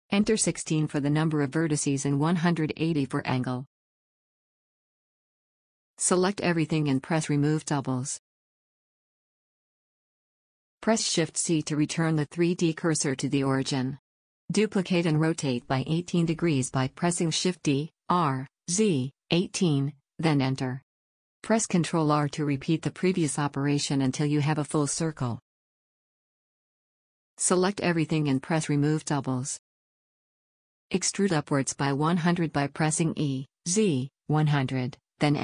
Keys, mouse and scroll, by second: 0.0 middle click, 0.3-2.1 drag, 5.1 middle click, 6.2 a, 6.3-7.6 middle drag, 6.3 a, 7.7 click, 8.6-9.9 middle drag, 10.2 middle click, 10.9 shift+c, 14.6 shift+d, 17.5-19.8 middle drag, 21.2 shift+r, 21.4-23.7 shift+r, 24.0 shift+r, 25.1 middle click, 25.1 click, 25.5 a, 25.6 middle click, 25.6 a, 29.2-30.4 drag, 30.4-32.3 middle drag, 32.5-35.0 middle drag, 34.1 e.